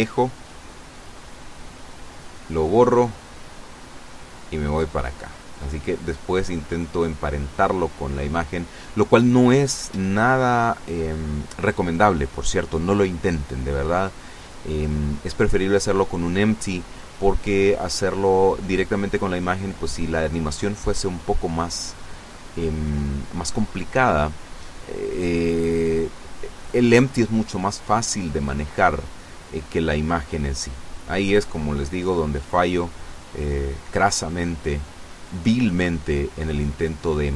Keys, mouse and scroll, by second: 0.8 right click, 2.1 x, 2.5 click, 3.1 right click, 3.8-5.2 drag, 6.2 KP_0, 13.7 right click, 15.1 shift+right click, 16.8 ctrl+p, 19.7 click, 20.3 right click, 21.5 r, 23.4 Escape, 24.9 r, 25.2 z, 26.4 Escape, 27.3 right click, 28.3 right click, 29.3 r, 29.7 z, 32.8 Escape, 35.3 right click.